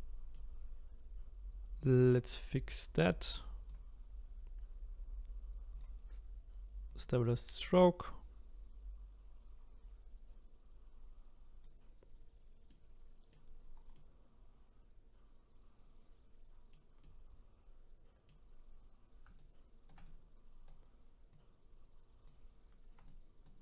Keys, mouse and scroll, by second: 1.9-4.9 drag, 5.7-10.6 drag, 12.7 middle click, 13.6-13.9 scroll down 1, 13.9-19.4 middle drag, 19.4-21.3 shift+right drag, 21.3-23.1 drag, 23.1-23.6 ctrl+right drag.